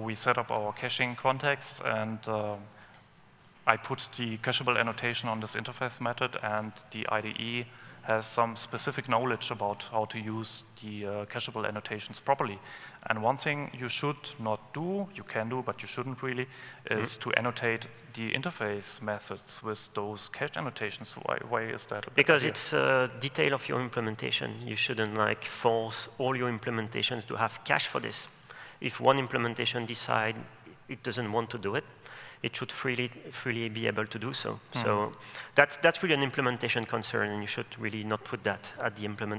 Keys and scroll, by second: 26.0 super+/.